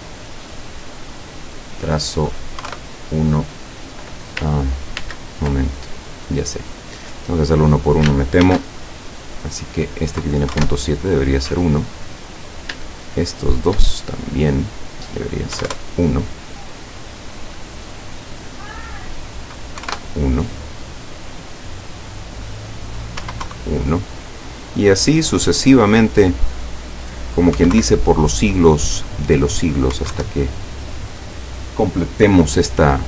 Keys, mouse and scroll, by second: 1.3 click, 2.6 KP_1, 2.8 KP_Enter, 5.0 ctrl+z, 6.1 click, 6.6 click, 7.5 click, 8.4 ctrl+shift+f, 9.5 click, 10.5 KP_1, 12.3 click, 13.4 shift+click, 14.3 click, 14.7 click, 15.7 KP_1, 17.1 click, 18.9 click, 19.8 KP_1, 20.0 KP_Enter, 21.3 click, 22.5 click, 23.2 KP_1, 23.5 KP_Enter, 24.8 click, 26.5 click, 27.6 KP_1, 27.8 KP_Enter, 28.8 click, 29.5 click, 30.0 KP_1, 30.1 KP_Enter.